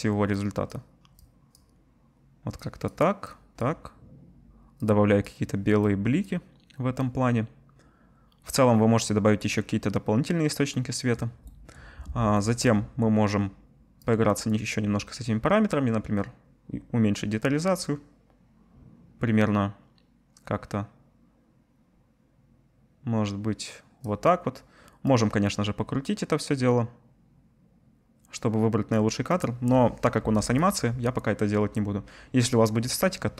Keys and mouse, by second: 26.1-27.9 middle drag, 30.6-33.3 drag.